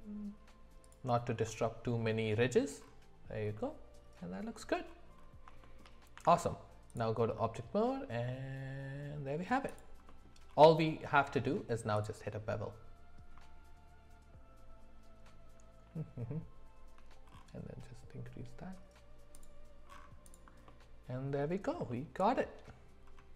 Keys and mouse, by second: 1.5 middle click, 3.5-4.6 middle drag, 5.6 shift+middle click, 6.1 Tab, 7.4-9.4 middle drag, 10.1 middle click, 11.1 q, 20.2 click, 20.7-21.4 middle drag, 21.9 shift+middle click.